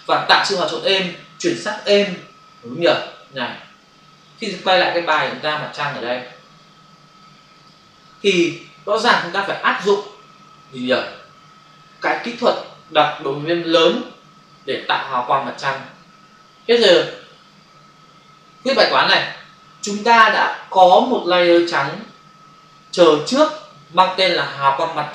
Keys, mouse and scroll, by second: 5.0 f, 7.5 click.